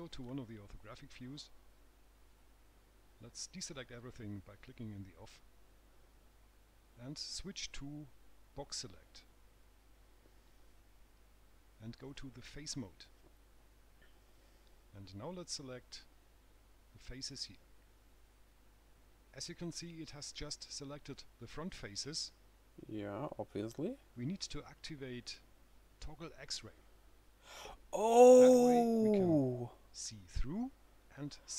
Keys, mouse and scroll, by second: 2.1 click, 4.5 click, 7.8 click, 13.3 click, 15.2 click, 19.1 right click, 28.3 click.